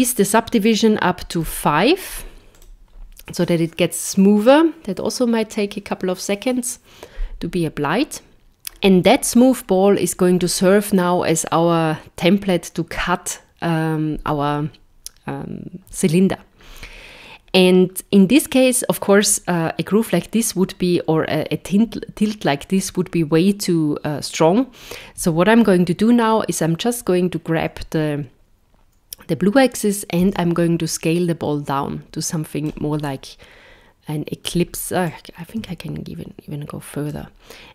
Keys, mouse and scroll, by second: 16.6 scroll up 3, 26.9 click, 33.1 middle click, 35.0 click.